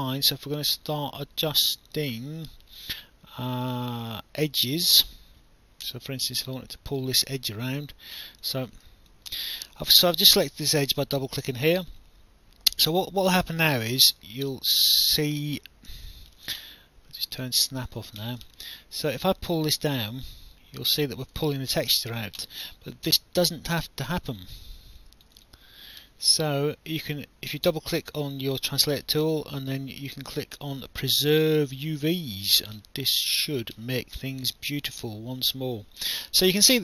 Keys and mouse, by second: 5.8 click, 6.5 alt+click, 8.4 click, 9.1 alt+click, 11.4 w, 13.8 click, 15.9 ctrl+z, 17.3 click, 18.5 alt+click, 19.8 click, 21.7 ctrl+z, 24.3 click, 32.0 click, 33.4 click, 34.9 click.